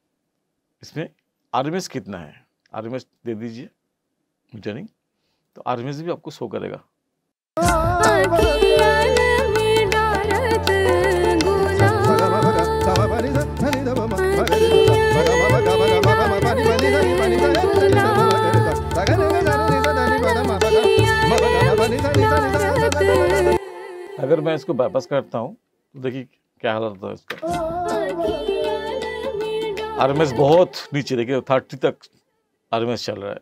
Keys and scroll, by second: 7.5 space, 23.5 space, 27.3 space, 30.5 space.